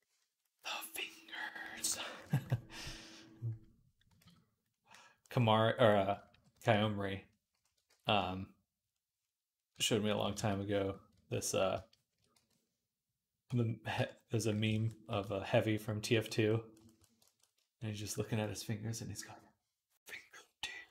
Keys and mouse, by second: 2.2-4.0 ctrl+right drag, 2.7 d, 3.4 click, 4.1 ctrl+z, 6.2 ], 6.4 ], 6.6 ], 7.7 ctrl+z, 10.2 ctrl+z, 12.2 v, 16.0 v, 16.7-20.9 shift+middle drag.